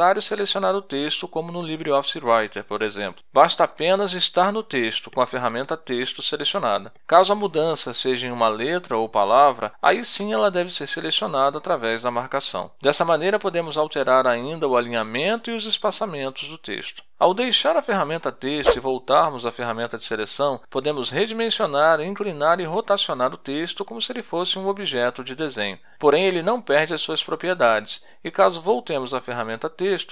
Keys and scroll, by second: 28.7 End, 29.4 Return, 29.5-30.1 typing.